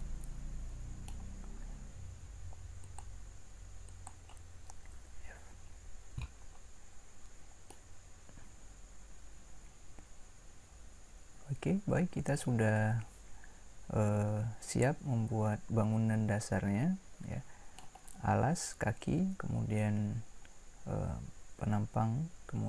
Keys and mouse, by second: 4.9 f, 8.6-10.9 middle drag, 19.0-22.6 middle drag.